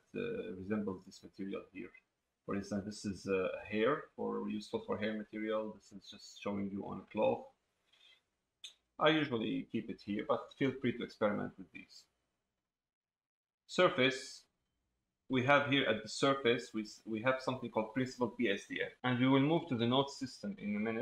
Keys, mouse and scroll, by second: 5.6 click, 8.7 click.